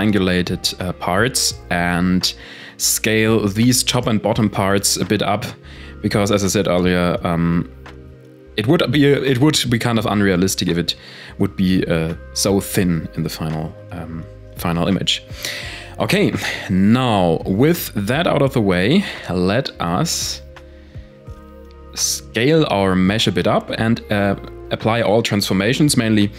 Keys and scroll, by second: 2.7 s, 5.0 z, 5.3 Tab, 5.7 a, 5.8 a, 21.0 s, 22.4 ctrl+a.